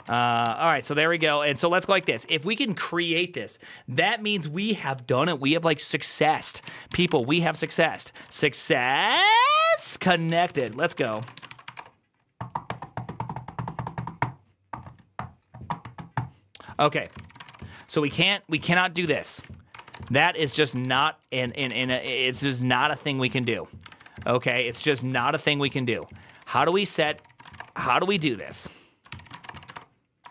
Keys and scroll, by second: 0.0-2.6 typing, 6.9-8.8 typing.